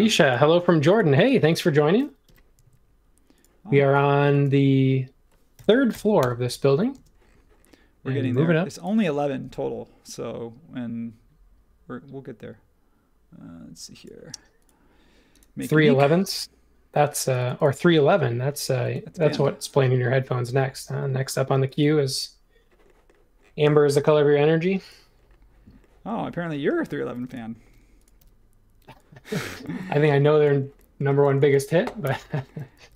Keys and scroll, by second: 2.2 m, 5.5 x, 5.9 x, 6.2 Return, 6.9 space, 28.2 p, 29.6 e, 31.2 space, 32.0 BackSpace, 32.8 e.